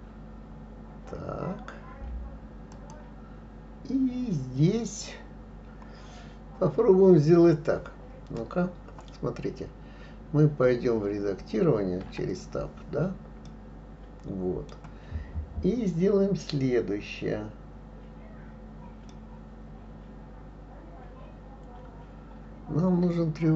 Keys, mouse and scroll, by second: 12.1 Tab, 13.5-16.5 middle drag, 19.1-22.2 middle drag.